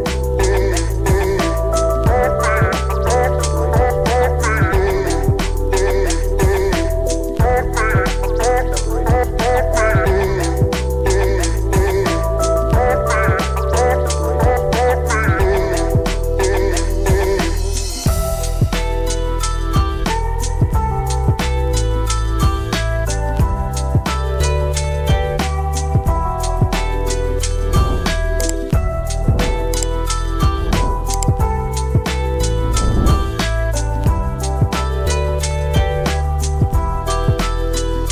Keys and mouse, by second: 9.6 middle click, 10.1 click, 10.8 n, 12.2 click, 13.3-14.6 drag, 15.1-16.7 drag, 20.5 click, 21.2-24.4 drag, 26.7 g, 27.5 z, 29.7 shift+middle click, 30.7 g, 31.0 z, 31.5 z, 32.8 g, 33.4 z, 35.8 g, 36.1 x.